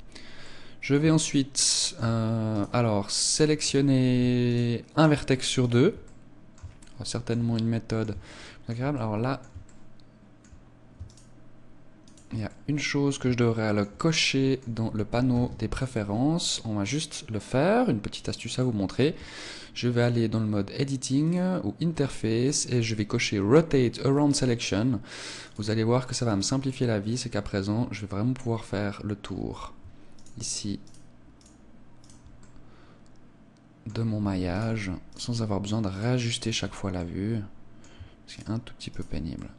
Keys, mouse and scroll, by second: 0.4 middle click, 1.2 shift+middle click, 2.5 right click, 4.4 shift+right click, 4.9 shift+right click, 6.0 middle click, 6.7 shift+middle click, 7.4 middle click, 8.2 shift+middle click, 8.9 middle click, 9.6 shift+middle click, 12.0 shift+right click, 12.4 middle click, 13.3 shift+middle click, 14.1 middle click, 15.2 ctrl+s, 16.8 click, 26.0 click, 26.6 middle click, 30.1 shift+right click, 30.8 shift+right click, 32.0 shift+right click, 32.3 middle click, 34.4 shift+right click, 35.0 shift+right click, 36.4 shift+right click, 36.9 middle click, 38.2 shift+right click, 38.8 shift+right click, 39.3 middle click.